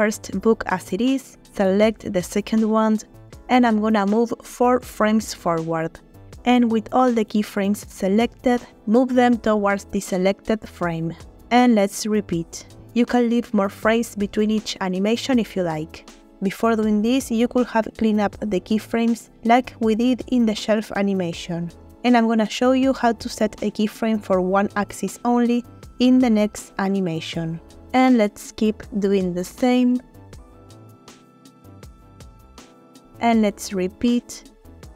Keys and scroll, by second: 3.4 Right, 3.8 Right, 4.2 Right, 4.8 Right, 7.1 a, 8.4 g, 10.5 Right, 10.7 Right, 10.9 Right, 11.1 Right, 13.4 g, 15.2 Right, 15.5 Right, 15.7 Right, 16.0 Right, 18.3 g, 20.3 Right, 20.5 Right, 20.7 Right, 21.0 Right, 23.2 g, 27.0 Right, 27.2 Right, 27.4 Right, 27.7 Right, 29.6 g, 31.9 Right, 32.2 Right, 32.4 Right, 32.6 Right, 34.5 g.